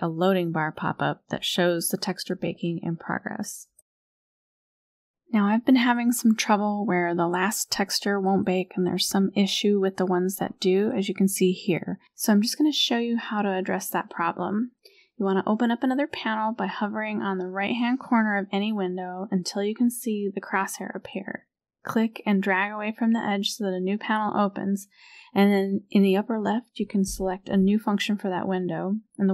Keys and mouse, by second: 1.1-5.1 drag, 11.6 click, 20.9-23.0 drag, 25.6-29.3 drag.